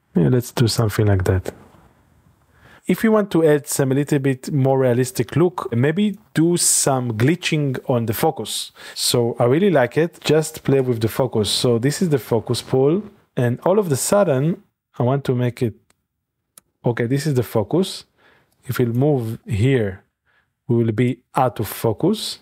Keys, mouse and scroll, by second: 0.7 shift+click, 2.3-4.7 middle drag, 4.7-8.4 drag, 10.2-13.2 drag, 16.6 i, 18.6 click, 19.1-19.9 scroll up 2, 19.9-21.1 middle drag.